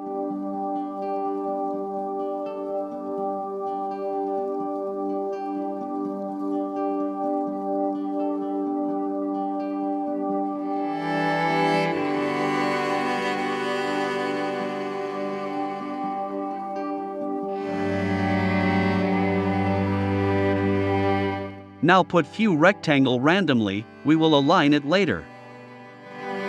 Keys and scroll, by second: 9.0 super+c, 9.3 super+f, 9.7 shift+Right, 20.7 super+c, 21.1 super+f, 21.2 shift+Left, 21.7 super+c, 21.9 super+f, 22.2 shift+Left, 23.5 super+c, 23.9 super+f, 24.1 shift+Left, 24.7 super+c, 25.1 super+f, 25.3 shift+Left.